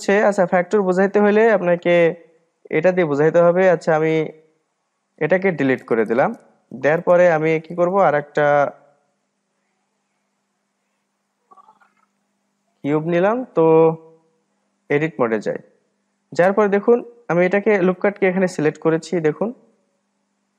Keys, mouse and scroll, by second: 3.1-6.2 drag, 6.4 Delete, 7.3-10.3 drag, 10.8-11.2 scroll down 1, 11.2-13.0 middle drag, 13.0-16.1 drag, 17.9-18.9 drag, 18.9-20.1 middle drag, 20.1-20.5 scroll up 2.